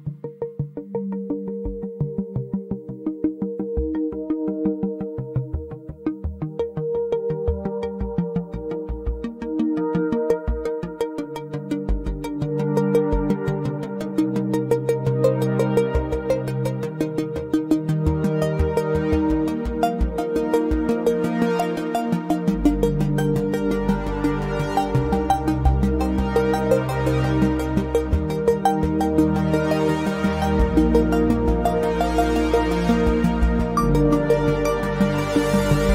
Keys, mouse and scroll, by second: 0.7 click, 1.6 alt+middle click, 4.3 click, 6.5 right click, 7.9 click, 8.9 ctrl+c, 8.9 typing, 9.5 click, 10.9 click, 10.9 ctrl+v, 11.4 Return, 12.4 click, 15.2 click, 28.7 alt+middle click, 29.0-29.5 scroll up 1, 29.9 scroll down 1, 30.3 alt+middle click, 30.7-31.2 scroll down 1, 31.3 alt+middle click, 31.6-32.0 alt+scroll up 2, 32.0 scroll down 1, 32.7 ctrl+click.